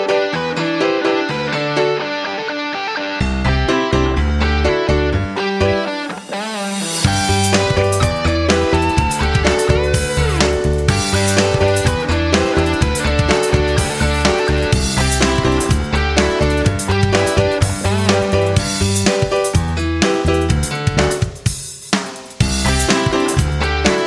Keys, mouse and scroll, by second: 2.3 F9, 3.7-6.0 shift+drag, 10.8 click, 12.5 shift+click, 14.6 shift+click, 19.6 Right, 20.5 click.